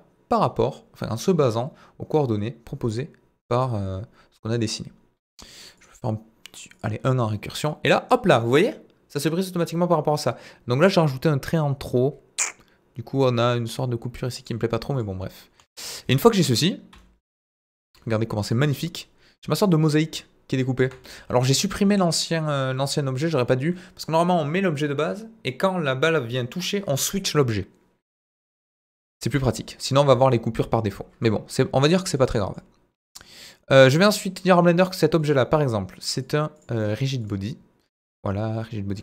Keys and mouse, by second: 15.6 Delete, 15.8 middle click, 16.9 d, 17.0-18.5 right drag, 18.5 d, 18.7-19.6 middle drag, 20.8 KP_1, 28.6 z, 29.5-29.9 drag, 30.1 z, 30.9-31.2 middle drag, 31.9-32.6 middle drag, 35.2 click, 36.2 click, 37.2 drag, 37.9 drag.